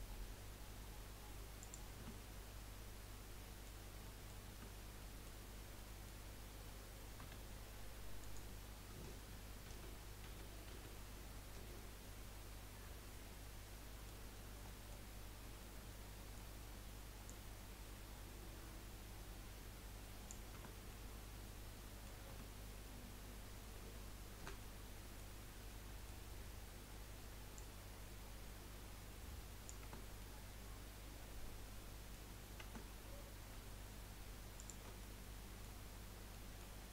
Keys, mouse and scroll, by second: 2.1 Tab, 2.4 scroll down 1, 2.6-3.8 middle drag, 3.8 scroll up 2, 4.0 middle click, 4.5 Tab, 5.0 middle click, 5.5 scroll down 1, 5.7-7.2 middle drag, 7.2 s, 9.7 ctrl+z, 10.3 ctrl+z, 10.7 ctrl+z, 12.2-17.2 middle drag, 17.2 click, 20.5 Tab, 20.9-22.3 middle drag, 22.3 Tab, 24.6-27.5 middle drag, 27.5 click, 29.9 Tab, 30.2-32.6 middle drag, 32.6 Tab, 34.5 alt+shift+click, 35.0-36.9 middle drag.